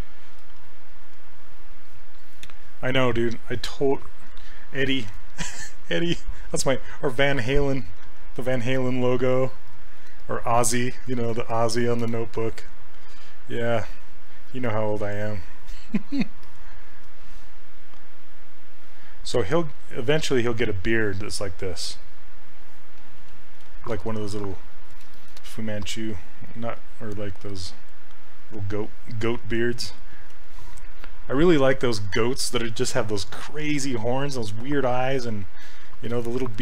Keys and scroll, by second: 8.0 s, 13.1 s, 23.4 ctrl+z, 27.4 s, 30.2 ctrl+z.